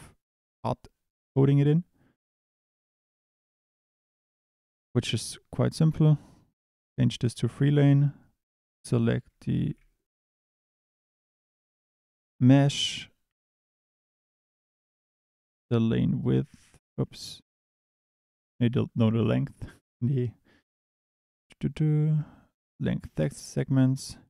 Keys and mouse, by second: 2.6 shift+d, 3.6 click, 4.4 click, 6.7 click, 8.7 drag, 9.6 Escape, 11.0 click, 17.0 Escape.